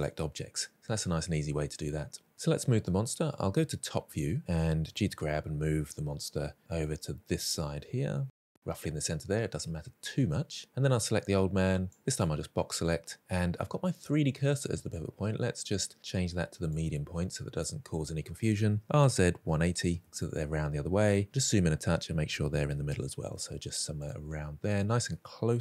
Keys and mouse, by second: 3.4 KP_7, 4.8 g, 11.8 drag, 14.8-16.6 drag, 18.6-19.9 typing, 20.0 Return, 21.2 shift+middle drag, 22.4 g, 24.4-25.6 middle drag.